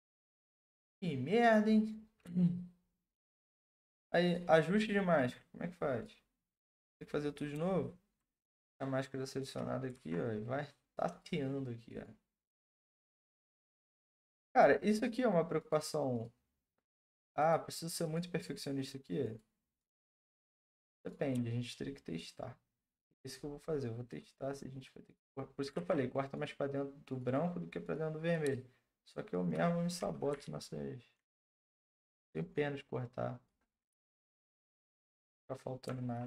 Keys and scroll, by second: 9.9 ctrl+z, 25.8 ctrl+z, 30.3-31.1 ], 31.6 ].